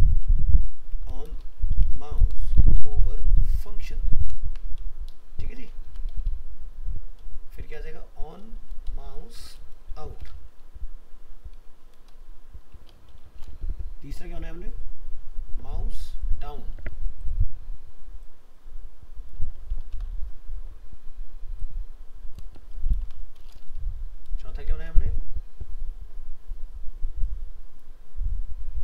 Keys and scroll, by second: 4.8 ctrl+shift+Left, 5.9 ctrl+c, 7.6 ctrl+v, 16.8 ctrl+v, 24.7 ctrl+v.